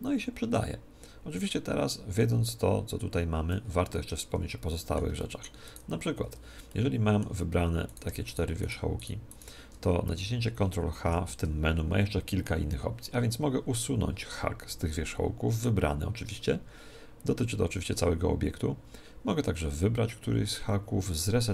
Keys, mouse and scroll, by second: 0.6-4.1 drag, 4.1-8.3 middle drag, 5.7 right click, 6.3 Tab, 7.9-11.3 right drag, 11.1 ctrl+h.